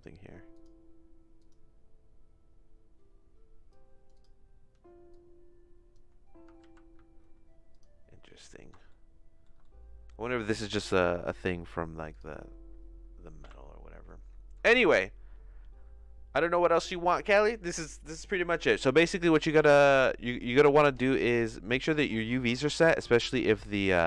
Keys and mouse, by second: 0.5 click, 1.4 click, 3.7 click, 5.1 click, 6.7 ctrl+z, 8.8 shift+middle click, 9.6 middle click, 12.1 click, 13.4 KP_Decimal, 23.5 click.